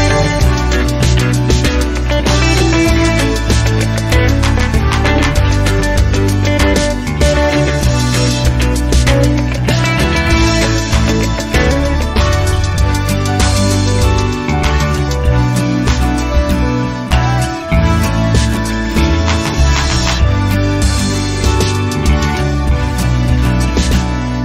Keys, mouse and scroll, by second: 0.0 ctrl+click, 1.0 click, 3.8 ctrl+click, 4.8 ctrl+click, 6.0 ctrl+click, 6.8 click, 8.0 click, 9.1 ctrl+click, 10.1 ctrl+click, 11.2 ctrl+click, 12.0 click, 13.2 click, 16.8 click, 17.9 click, 18.4 space, 18.8 click, 19.2 space, 19.6 click, 20.3 click, 20.3 space, 20.6 space, 21.0 click, 21.6 space, 22.3-23.0 scroll down 1.